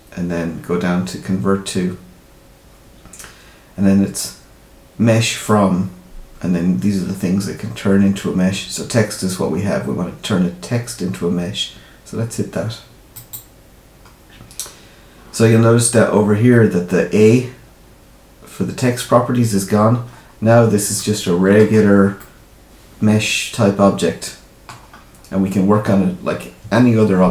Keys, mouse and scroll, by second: 15.6-16.4 scroll down 4, 20.0-20.8 scroll up 5, 20.9 shift+middle click, 21.7-22.1 scroll up 3, 22.1 middle click, 24.8-26.6 scroll down 5.